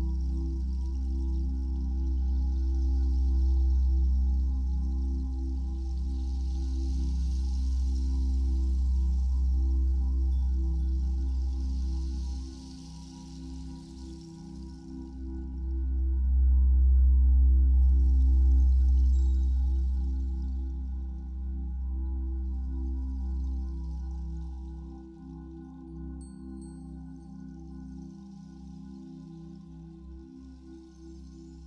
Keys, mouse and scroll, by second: 2.7 scroll up 1, 3.0 scroll down 1, 5.3 click, 10.8-12.3 middle drag, 13.7-15.0 drag, 15.0-31.6 middle drag, 16.4 scroll up 1, 23.0-24.6 scroll down 1.